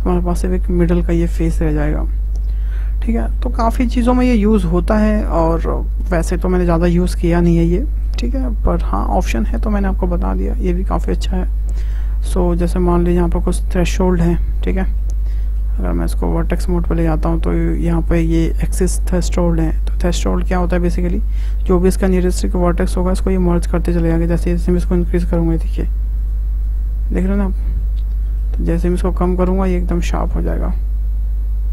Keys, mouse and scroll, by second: 4.2-10.0 middle drag, 10.5-13.2 shift+middle drag, 13.2 click, 13.9 middle click, 14.2-14.8 scroll up 1, 14.8-16.5 shift+middle drag, 16.5 click, 17.0-17.5 scroll up 3, 17.5-23.9 middle drag, 24.9-27.6 drag, 27.6 scroll down 2, 27.8-29.3 middle drag, 29.3-30.3 drag, 30.3-31.7 middle drag.